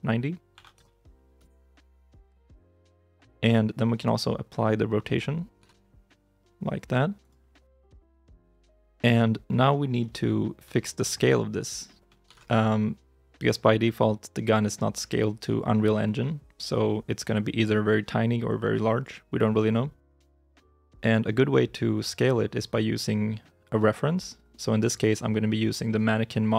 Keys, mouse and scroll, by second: 0.4 typing, 1.2 Return, 5.5 ctrl+a, 8.1 scroll up 1, 9.9 scroll down 1, 9.9 middle click, 10.6 shift+middle click, 12.1 ctrl+s.